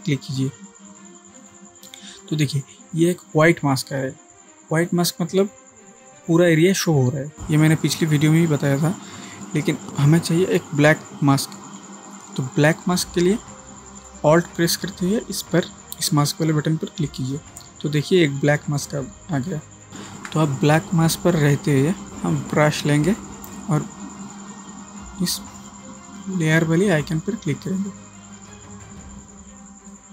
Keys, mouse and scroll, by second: 1.4 click, 9.9 ctrl+z, 14.9 ctrl+z, 17.2-19.4 alt+drag, 22.1 ctrl+space, 22.7 click, 26.1 click, 29.5 space, 30.0-30.1 space.